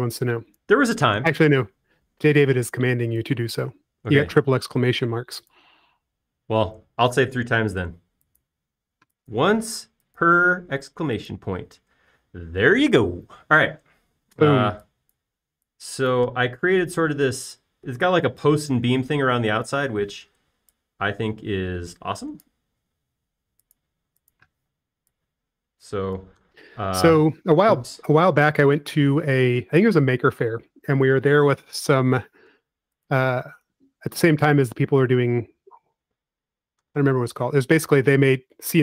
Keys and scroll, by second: 0.0 f, 15.6 e, 21.5 p, 23.2 Escape, 23.8 l, 25.4-26.2 typing, 27.6 typing, 29.6 super+z, 30.2 p, 32.6 space, 33.1 l, 35.3 space.